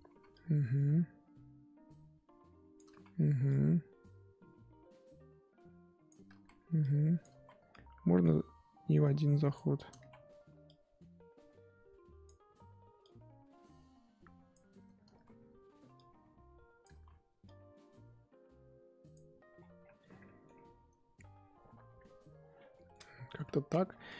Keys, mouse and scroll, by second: 0.0 ctrl+z, 0.3-2.9 drag, 2.9 ctrl+z, 3.4-6.3 drag, 6.3 ctrl+z, 6.8 click, 7.3 ctrl+z, 7.7-9.9 drag, 9.9 ctrl+z, 10.6-15.1 drag, 15.1 ctrl+z, 15.9-16.9 drag, 16.9 ctrl+z, 17.4-19.5 drag, 19.5-20.2 scroll down 19, 20.2 middle click, 20.5-21.6 scroll up 3, 21.6 scroll up 2, 22.7 middle click, 23.0-24.1 scroll up 14.